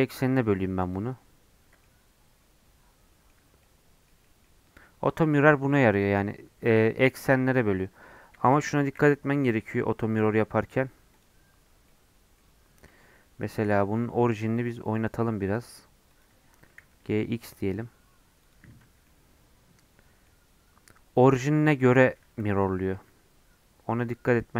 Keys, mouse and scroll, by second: 1.8-3.4 middle drag, 3.4 Tab, 3.6-5.5 middle drag, 5.5 Tab, 5.8-7.6 middle drag, 7.6 Tab, 8.4 shift+middle click, 8.7 shift+a, 9.6-10.2 scroll down 3, 10.2 s, 11.4 scroll down 7, 11.8 middle click, 12.7-14.5 right drag, 14.5 click, 15.3 middle click, 16.1 click, 16.5 g, 18.4 click, 18.8 Tab, 19.0-21.9 middle drag, 21.9 Tab, 22.4 n, 22.9 n.